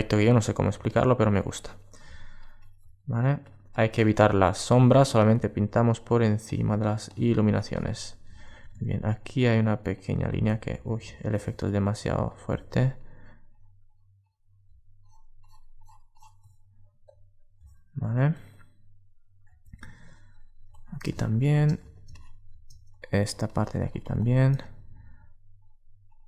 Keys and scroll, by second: 10.4 alt+super+z.